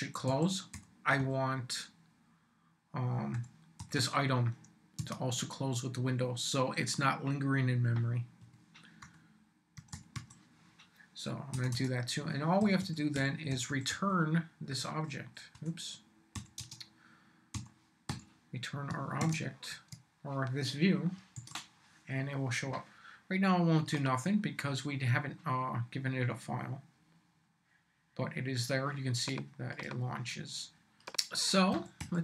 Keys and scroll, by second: 0.0-1.7 typing, 3.1-4.5 typing, 5.0 Tab, 8.4-10.6 typing, 11.5 Return, 12.4-14.7 typing, 16.3-19.5 typing, 19.7 shift+Tab, 20.4 Tab, 21.4 super+s, 31.7-32.2 typing.